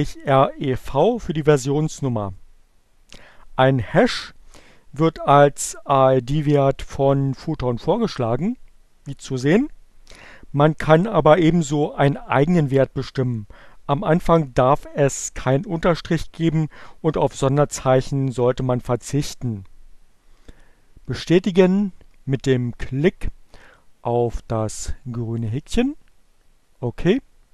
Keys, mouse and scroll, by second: 23.6-25.5 drag.